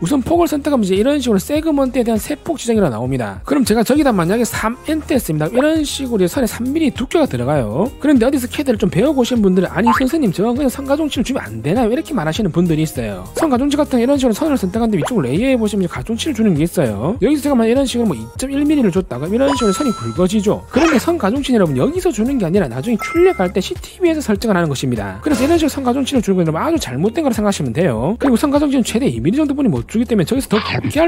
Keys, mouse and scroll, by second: 0.9 click, 4.9 3, 14.5 click, 15.0 click, 16.0 click, 19.4 click.